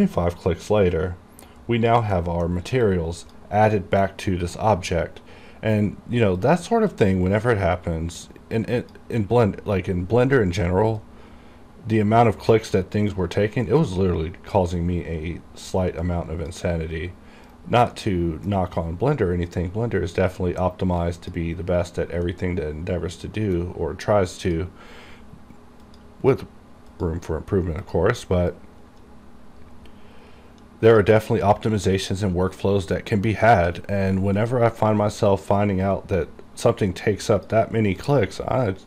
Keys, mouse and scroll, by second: 0.1-2.3 drag, 2.3 middle click, 2.7-3.0 scroll down 1, 3.0 click, 3.8 middle click, 4.2-6.0 scroll up 1, 6.5 click, 6.5-13.6 drag, 13.6-14.0 scroll up 1, 15.8 click, 17.0 scroll up 1, 17.6 right click, 18.1 middle click, 18.7 scroll up 1, 21.1 click, 22.4-24.6 middle drag, 24.6-32.1 drag.